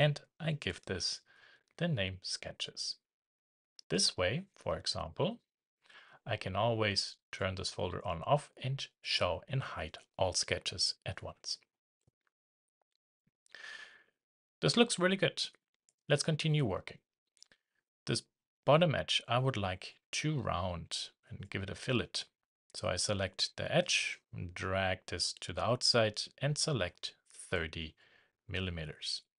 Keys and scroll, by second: 1.1 2, 12.9 shift+2.